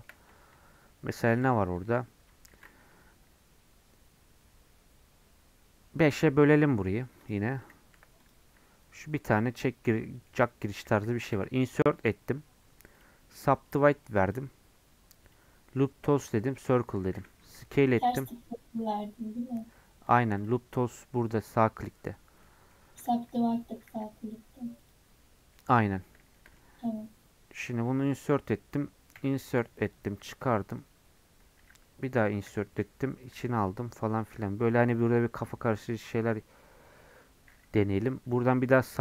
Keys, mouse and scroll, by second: 0.3 Tab, 2.5 ctrl+r, 8.3 click, 10.1 middle click, 10.3-11.3 scroll up 1, 11.3 |, 14.3-17.7 right drag, 17.7 s, 22.2 right click, 22.4 middle click, 22.7 scroll up 2, 23.1 shift+middle click, 23.5-23.9 scroll up 1, 23.9 e, 25.6-26.8 middle drag, 26.8-28.0 scroll up 1, 29.1 i.